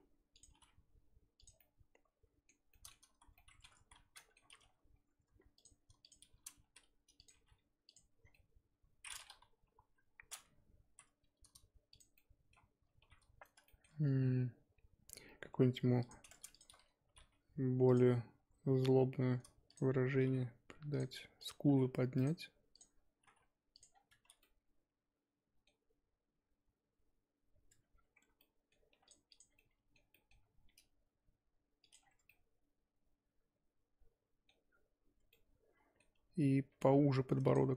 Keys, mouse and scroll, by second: 1.6-3.1 middle drag, 3.1 ctrl+z, 3.4 middle click, 3.7 ctrl+z, 4.2 middle click, 4.5 2, 5.6 click, 6.0 ctrl+click, 6.6 s, 8.2 scroll down 4, 8.3-9.4 middle drag, 9.4 scroll up 2, 9.6 KP_3, 10.1-10.8 scroll up 1, 10.8 r, 12.2 middle click, 12.6-13.0 scroll up 2, 13.0 1, 13.7 shift+middle click, 14.6 scroll up 1, 16.0 click, 16.5 shift+click, 17.0 g, 19.7 click, 20.2 g, 21.4 click, 21.6 g, 22.7 click, 23.2 g, 23.9 scroll down 5, 24.4-26.7 middle drag, 26.7 scroll up 2, 27.7 Tab, 27.9-28.4 scroll up 4, 28.4 middle click, 28.9 1, 29.0 click, 29.3 click, 29.5 scroll down 2, 29.6-30.6 middle drag, 30.6 g, 32.0 scroll down 1, 32.2 Tab, 32.3-34.7 middle drag, 34.7 scroll up 1, 35.2 Tab, 35.3 middle click, 36.1 2, 36.7 3, 37.5 click.